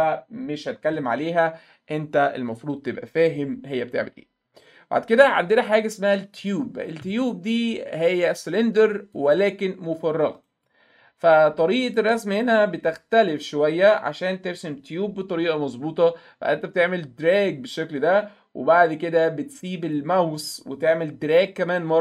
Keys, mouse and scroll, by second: 2.6 click, 6.4 click, 9.2-10.7 drag, 10.4 right click, 11.8-12.8 alt+middle drag, 16.9-20.0 drag.